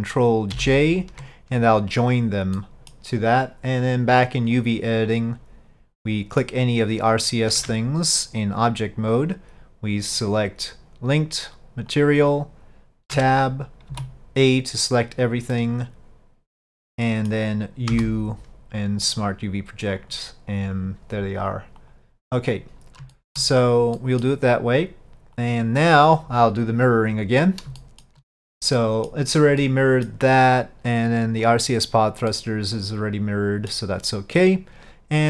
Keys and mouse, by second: 0.6 ctrl+j, 2.6-3.0 middle drag, 21.9 click, 23.2 shift+middle drag, 24.0 middle drag, 25.5 click, 27.8 shift+middle drag, 28.8-29.2 middle drag, 29.7 middle click, 32.4-33.8 middle drag.